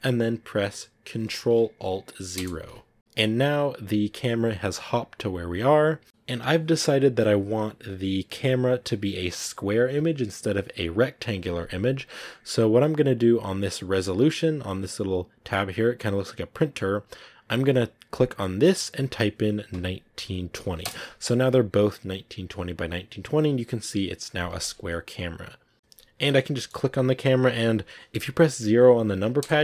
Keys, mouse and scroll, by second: 2.2 ctrl+alt+KP_0, 24.6 click, 25.5 scroll down 3, 25.7 middle click, 25.7 KP_0, 26.3 scroll up 1, 26.4 middle click, 27.4-29.3 right drag, 29.3 KP_0.